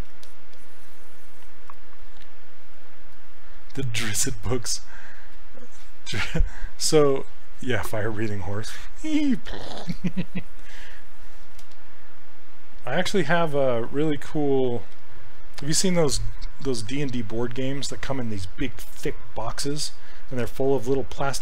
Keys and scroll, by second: 8.5 s.